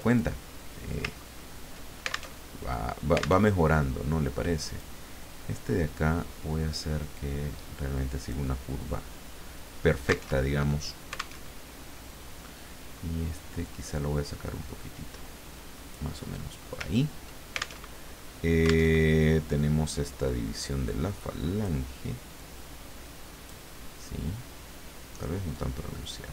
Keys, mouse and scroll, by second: 1.2-1.8 ctrl+scroll up 2, 2.4 ctrl+alt+Tab, 3.4 alt+Tab, 4.7 click, 6.2-8.5 drag, 10.3 alt+Tab, 11.4 alt+Tab, 13.6-16.1 drag, 16.2 middle click, 16.8 ctrl+scroll down 2, 17.8 ctrl+alt+Tab, 18.9 alt+Tab, 20.0-21.9 drag, 22.3-23.7 drag, 25.5-26.3 drag.